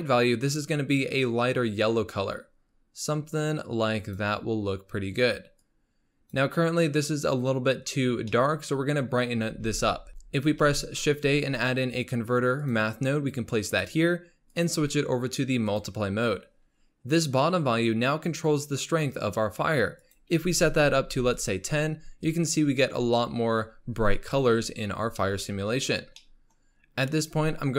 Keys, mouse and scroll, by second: 5.9-8.1 drag, 8.1-8.4 scroll down 2, 8.4-9.6 middle drag, 9.6 shift+a, 10.1 x, 10.6 shift+a, 14.5-17.6 drag, 20.0-21.6 drag, 26.2-26.7 middle drag, 26.7-27.3 scroll up 2, 27.3-27.7 scroll up 4.